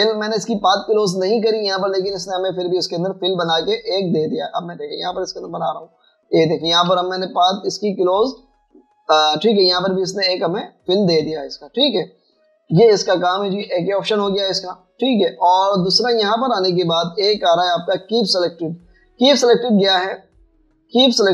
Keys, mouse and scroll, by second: 7.9 typing, 9.4 typing, 12.2 typing, 12.9 double click, 13.8 Delete, 17.1 double click.